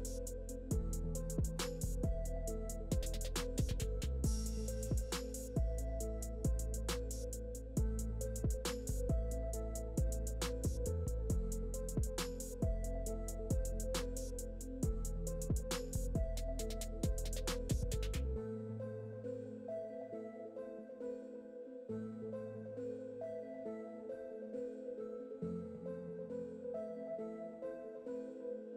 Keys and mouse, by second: 0.6 ctrl+r, 0.7 g, 1.3 ctrl+r, 1.8 s, 2.0 Tab, 2.2 KP_1, 2.4 ctrl+KP_3, 2.6 Tab, 2.8 s, 3.0 s, 4.5 Tab, 4.8 Tab, 5.2 f, 5.3 Tab, 5.3 s, 5.6 s, 5.8 Tab, 6.0 ctrl+z, 6.2 ctrl+r, 6.2 Tab, 6.4 ctrl+z, 6.6 Tab, 6.6 ctrl+r, 6.8 s, 8.0 Tab, 8.2 KP_7, 8.4 ctrl+r, 8.8 Tab, 9.0 middle click, 9.3-13.1 typing, 9.5 Tab, 10.0 Tab, 10.4 Tab, 10.4 middle click, 11.3 Tab, 11.4 middle click, 11.8 click, 12.2 ctrl+z, 13.3 Tab, 13.7 middle click, 14.9 middle click.